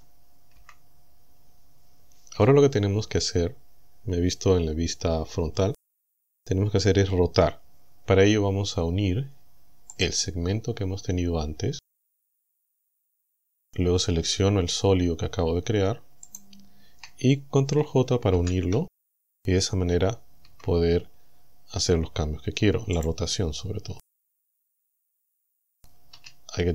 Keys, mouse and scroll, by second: 0.6 KP_1, 10.0 right click, 16.3 shift+right click, 18.4 ctrl+j, 20.5 Tab, 23.0 click, 24.3 shift+middle click, 25.4-25.7 scroll up 2, 26.2 a.